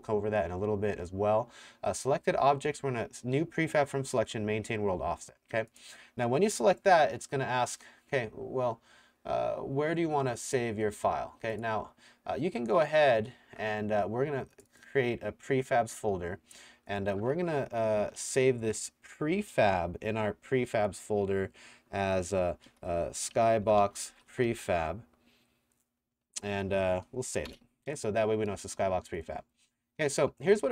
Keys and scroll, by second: 22.5-25.0 typing, 27.5 KP_Enter, 29.6 w.